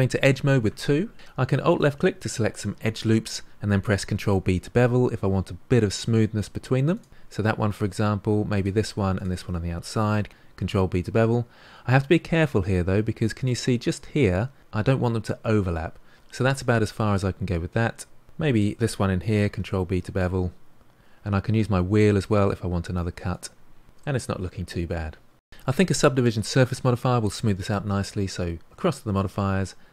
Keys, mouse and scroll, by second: 0.6 2, 1.1 ctrl+z, 1.6 alt+click, 4.0 ctrl+b, 8.5 alt+click, 9.1 alt+shift+click, 10.2 ctrl+b, 17.8 middle click, 18.5 alt+click, 19.4 ctrl+b, 23.9 Tab, 24.3-24.8 scroll down 3, 24.8-25.5 middle drag, 28.8 click.